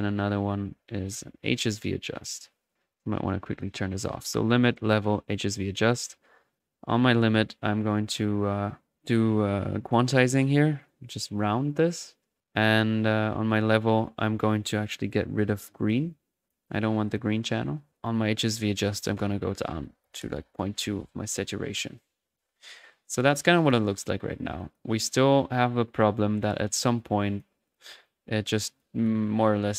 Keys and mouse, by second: 0.0-26.9 typing, 0.0 right drag, 0.4 click, 2.8 click, 5.3 click, 6.5 click, 6.8 click, 7.8 click, 8.9 click, 9.8 click, 10.8-12.3 drag, 12.6 click, 12.9-13.4 middle drag, 13.4 click, 14.6-14.9 drag, 16.0-16.7 drag, 17.0-19.4 drag, 23.0 middle click, 23.5 click, 24.5 click, 25.5-26.3 right drag, 26.9 click, 27.6-28.1 drag, 28.7 click.